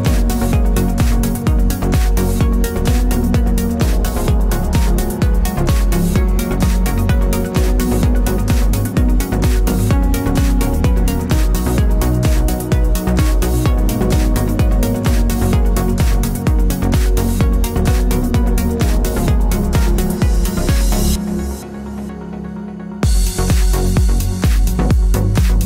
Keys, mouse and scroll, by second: 0.2 KP_Enter, 1.4 ctrl+click, 1.9-3.3 typing, 3.4 click, 4.1 ctrl+=, 4.4-5.5 typing, 5.1 click, 7.3 click, 13.6 click, 14.6 ], 16.0 ctrl+click, 16.8 ctrl+g, 17.5 ctrl+[, 18.7 click, 19.2-20.8 typing, 21.1 ctrl+s, 22.7 ctrl+-, 24.6 click, 25.0 click.